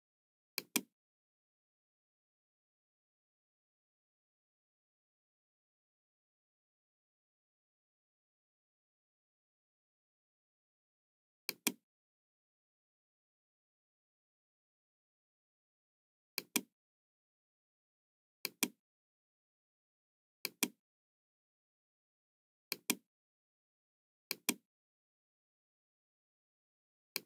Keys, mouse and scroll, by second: 0.5 click, 11.3 click, 13.0-14.6 middle drag, 16.3 click, 18.4 click, 20.4 click, 22.6 click, 24.2 click, 27.0 click.